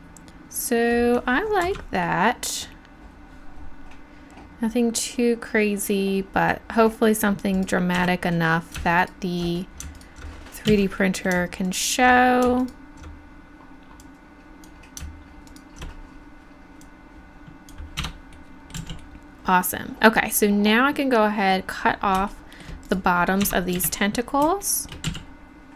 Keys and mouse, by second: 1.6 Tab, 7.6 right click, 8.0 Tab, 9.0-11.0 right drag, 10.7 z, 14.5-15.5 drag, 17.5 click, 18.0 Tab, 18.8 z, 22.9 right click, 23.5 Tab, 23.8 KP_1, 25.1 z.